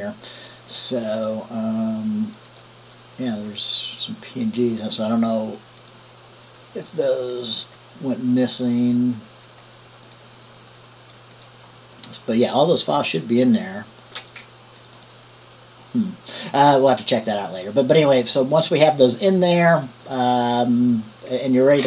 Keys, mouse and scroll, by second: 0.9 click, 2.7 click, 6.0 click, 9.7 middle click, 11.5 click, 13.2-14.2 drag, 14.4 click, 15.0 click, 15.2 click.